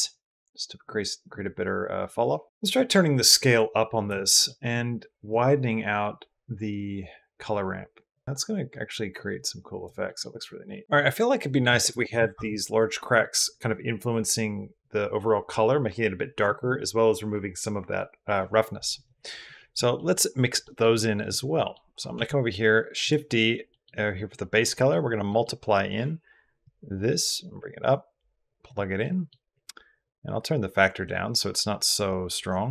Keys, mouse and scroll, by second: 2.1 middle click, 2.4-3.9 middle drag, 4.1 middle drag, 5.2-9.6 middle drag, 9.8 middle drag, 10.5 middle drag, 19.4 middle drag, 19.9 middle drag, 20.4 middle drag, 21.0 click, 21.4 drag, 21.9 shift+d, 23.6 click, 24.7 click, 25.2 middle click, 26.4-28.5 drag, 28.9 drag, 31.3 click.